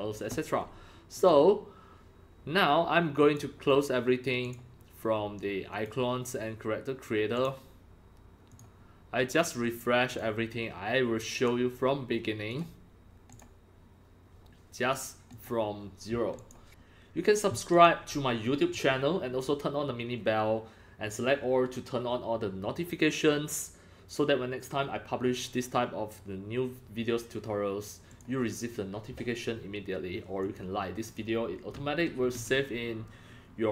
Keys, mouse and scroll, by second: 1.2 click, 3.2 click, 4.4 click, 5.7 click, 7.3 click, 8.5 click, 9.3 click, 10.1 click, 11.4 click, 12.5 click, 13.3 click, 14.8 click, 15.3 click, 16.4 click, 17.7 click, 28.1 click, 29.0-32.0 drag.